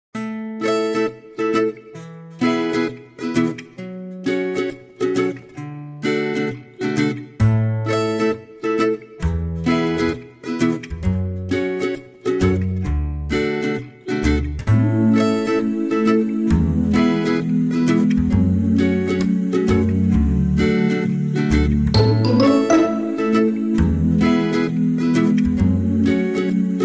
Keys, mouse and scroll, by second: 2.4 shift+c, 3.2 shift+middle click, 4.8 shift+a, 9.9 g, 11.1 click, 16.3 click, 20.5 middle click, 22.8 KP_1, 25.3 t.